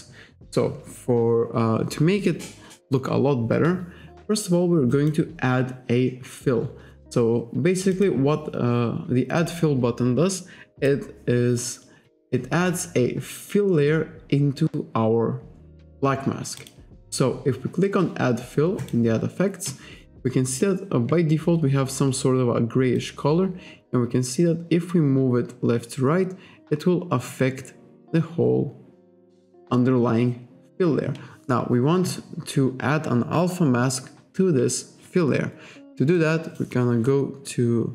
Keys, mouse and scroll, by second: 5.0 click, 8.0 click, 9.5 click, 10.9 click, 16.6 click, 18.8 click, 23.0 click, 36.2 click.